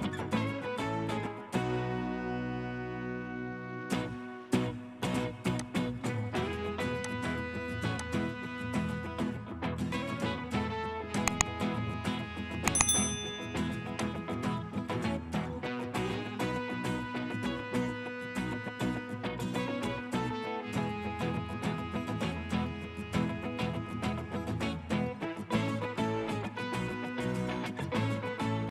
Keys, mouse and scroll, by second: 1.2 middle click, 4.6 right click, 9.2-11.2 scroll up 1, 16.5-17.7 scroll up 1, 18.0 middle click, 23.8-24.1 scroll down 1, 25.8-26.3 scroll up 1, 26.3-26.8 scroll down 1, 26.8 middle click.